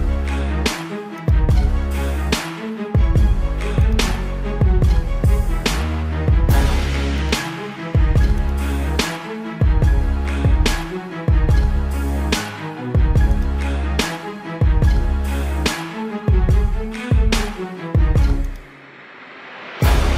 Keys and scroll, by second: 1.1-3.7 typing, 5.6 space, 7.1 space, 8.8 space, 10.7 space, 12.9 space, 13.6 space, 14.1 space, 15.5 ctrl+-, 16.0 ctrl+-, 16.5 space, 19.8 space.